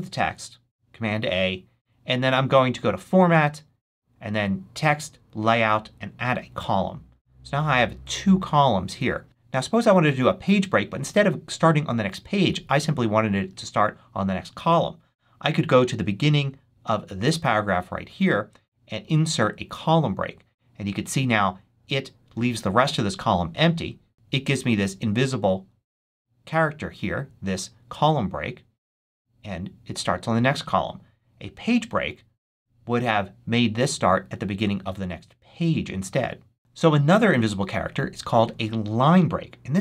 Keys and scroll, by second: 0.1 super+a.